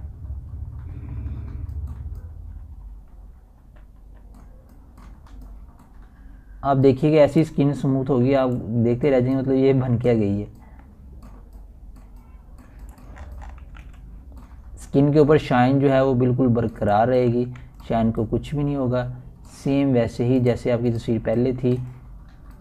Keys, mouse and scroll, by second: 0.9 ], 0.9 [, 1.0-11.4 drag, 11.4 scroll down 1, 11.9-12.4 typing, 12.7-15.8 drag, 15.8 scroll up 1, 16.2 typing, 16.6-19.8 drag, 19.8 scroll down 1, 20.0 ], 20.4-22.6 drag.